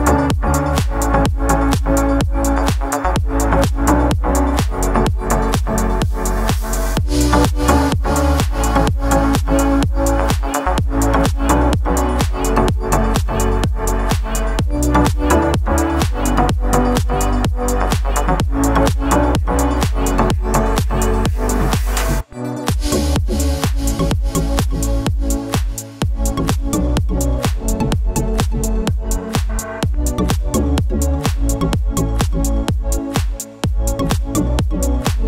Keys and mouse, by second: 0.3 middle click, 0.9 shift+middle click, 1.5 middle click, 1.9 middle drag, 2.5 shift+middle click, 2.7 middle drag, 3.2 click, 3.5 shift+middle click, 3.8-5.2 drag, 5.4-6.5 drag, 6.5-6.9 middle drag, 7.1 shift+click, 10.1 drag, 10.3 middle click, 11.0-12.1 drag, 12.2 middle click, 12.9 shift+middle click, 14.6 shift+middle click, 15.6 middle click, 16.5-17.0 drag, 17.2 click, 17.8 middle click, 18.8 shift+middle click, 19.1-21.6 drag, 21.7 shift+middle click, 21.9 alt+h, 22.2 shift+middle click, 22.4 shift+z, 22.6 shift+z, 23.0 click, 23.5 shift+middle click, 23.8 click, 24.5 shift+middle click, 24.9 shift+middle click, 25.1 middle drag, 25.8 shift+middle drag, 26.2 shift+a, 27.1 click, 27.7 s, 28.2 middle drag, 28.6 Tab, 29.0 3, 29.1 click, 29.6 x, 29.7 middle click, 30.8-33.5 typing, 32.9 middle click, 33.3 middle click, 34.1 middle click, 35.2 middle click.